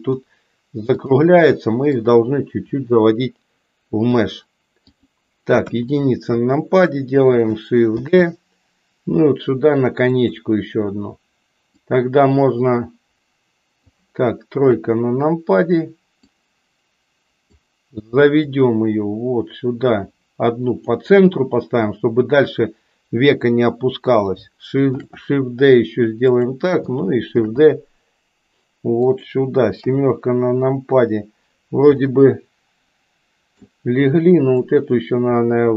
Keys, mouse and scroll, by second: 0.9 click, 1.9-4.2 drag, 4.8 click, 5.7 KP_1, 8.0 shift+d, 11.7-13.9 drag, 14.7 KP_3, 16.3-17.5 drag, 18.5-20.8 drag, 24.9 shift+d, 29.9 KP_7, 31.9-33.8 middle drag, 34.8-35.7 drag.